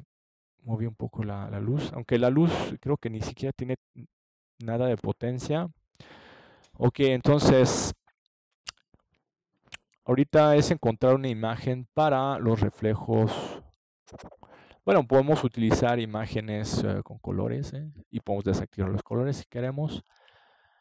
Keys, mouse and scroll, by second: 14.0-15.1 middle drag, 15.5 click, 15.7 middle click.